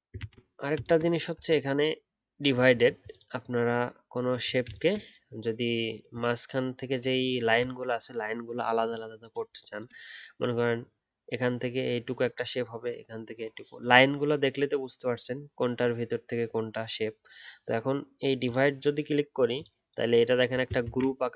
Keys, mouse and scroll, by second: 0.1 ctrl+z, 2.7 alt+scroll down 1, 7.6-8.2 scroll down 1, 20.8 ctrl+z.